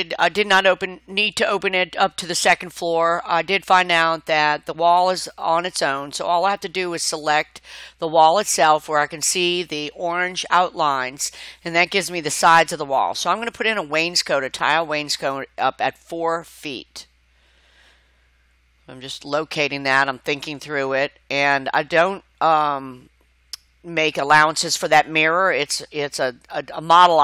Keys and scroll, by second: 24.3 Escape.